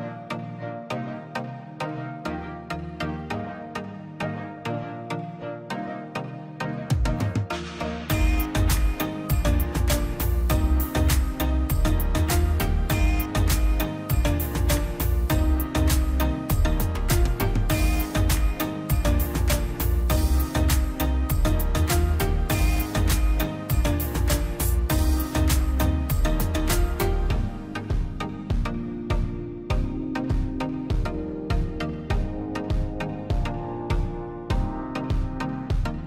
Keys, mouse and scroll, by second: 0.4 scroll down 1, 2.1 scroll up 1, 2.1 middle click, 2.6 scroll up 1, 3.3 middle click, 3.8-4.3 scroll up 1, 4.3 middle click, 4.7 click, 5.0 scroll up 1, 5.2 click, 5.4 scroll down 1, 5.6 middle click, 6.1 p, 6.5-8.1 drag, 8.1-8.8 scroll up 1, 8.8 space, 9.0 click, 9.2 scroll up 1, 9.4 click, 10.0 p, 10.2 click, 10.7 scroll down 1, 11.0 middle click, 11.7 click, 13.7 click, 14.8 middle click, 15.2 scroll down 1, 15.5-16.7 middle drag, 16.7 scroll down 1, 17.0 middle click, 17.6 scroll up 1, 18.3 l, 18.6-19.0 scroll up 1, 19.0 Escape, 19.3 space, 20.0 p, 20.3 scroll up 1, 20.5 Escape, 20.9 r, 21.6 click, 21.9 scroll down 1, 24.4 click, 25.1-25.5 scroll down 1, 26.3 click, 26.6 scroll down 1, 27.7 space, 28.1 p, 28.5 scroll down 1, 28.9-30.0 drag, 30.0 scroll down 1, 30.6 click, 31.2 click, 32.0-32.7 scroll down 2, 32.3 middle click, 32.9 middle click, 33.1 scroll down 1, 33.4 middle click, 34.4 click.